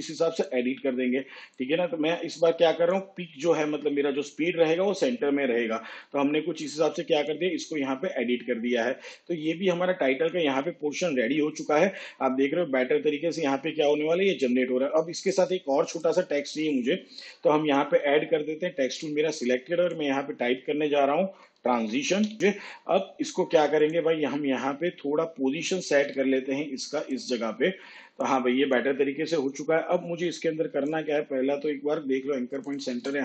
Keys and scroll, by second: 21.3 shift+t, 21.6 shift+r, 22.1 shift+a, 26.1 p.